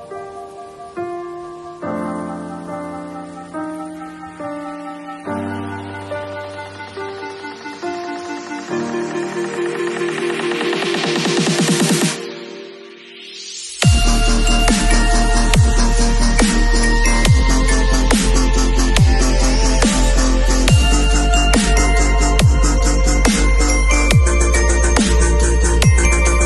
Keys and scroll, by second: 0.9 super+z, 2.6 i, 4.6 alt+shift+BackSpace, 7.8 super+u, 14.3 v.